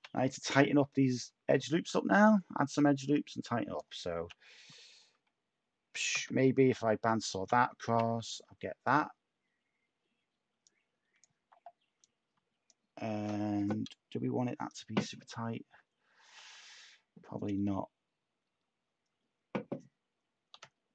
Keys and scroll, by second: 1.2 Tab, 4.2 u, 6.1 x, 7.8 /, 8.5 Tab, 20.5 x.